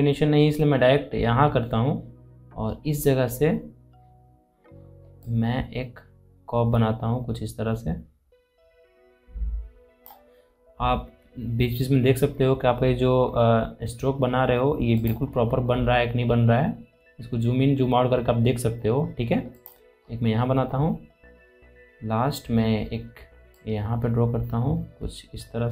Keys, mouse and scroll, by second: 5.0-10.3 drag, 10.3 scroll up 1, 12.3 scroll down 1, 14.8 alt+click, 15.0-15.5 scroll down 1, 19.3 click, 19.7 scroll down 1, 23.3-25.7 drag.